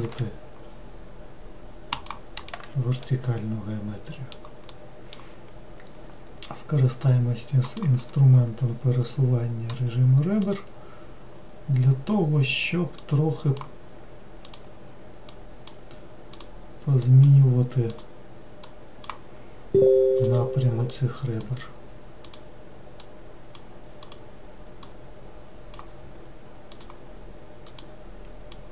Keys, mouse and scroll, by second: 0.0 ctrl+r, 3.0-7.6 middle drag, 7.6 click, 8.3-8.8 scroll up 2, 10.4 click, 11.3-13.0 scroll down 2, 13.0 click, 14.4 click, 15.3 click, 16.3 click, 17.0 click, 17.9 click, 18.7 click, 20.2 click, 20.9 click, 22.2 click, 23.0 click, 24.0 click, 24.8 click, 26.7 click, 27.6 click, 28.5 click.